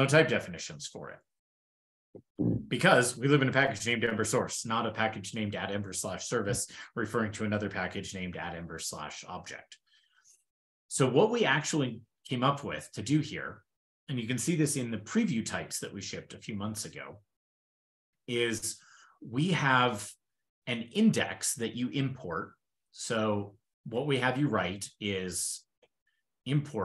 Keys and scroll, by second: 23.8 super+n, 24.7 ctrl+shift+l.